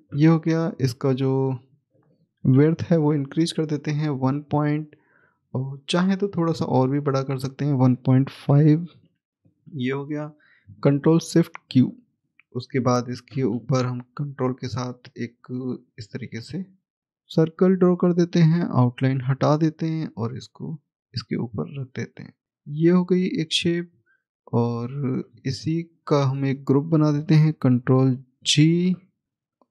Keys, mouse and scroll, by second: 2.4 1, 4.5 scroll up 1, 7.3 click, 8.6-9.4 typing, 12.2 click, 15.7 click, 18.9 right click, 20.5 right click, 20.5 click, 22.5-24.4 scroll down 1, 25.7 scroll up 1, 25.8 shift+click, 29.2-29.7 scroll down 1.